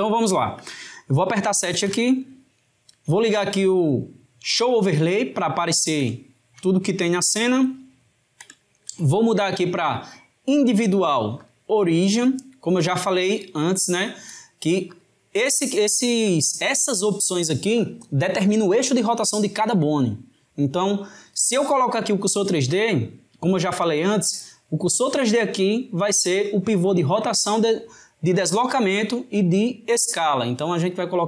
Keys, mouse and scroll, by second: 0.0-1.8 middle drag, 1.8 KP_7, 4.4 click, 5.3-10.6 ctrl+middle drag, 10.6 click, 11.4-14.5 drag, 14.9-19.4 drag, 30.8-31.2 drag.